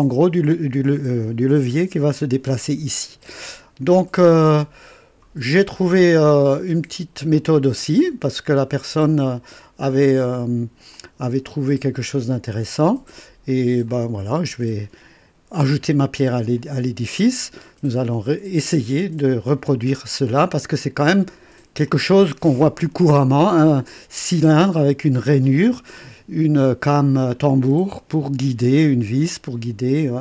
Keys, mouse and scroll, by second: 3.5-4.3 scroll down 2, 4.6 click, 5.8 scroll down 2, 6.3 right click, 7.3-8.7 drag, 10.9 click, 12.4 click, 13.9 click, 16.5 click, 20.4 click, 21.8-23.8 drag, 27.5 click.